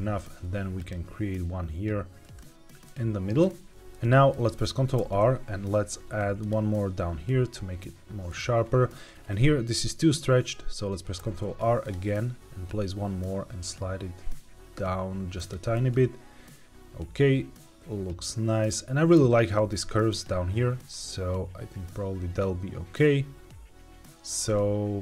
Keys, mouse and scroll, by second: 2.1 right click, 2.8 middle click, 3.8 Escape, 3.8 click, 3.8 middle click, 4.3-4.9 scroll down 1, 4.9 ctrl+r, 8.2 click, 8.6-10.2 scroll up 1, 11.1 ctrl+r, 15.3 click, 15.6-19.0 middle drag, 20.9-24.2 middle drag.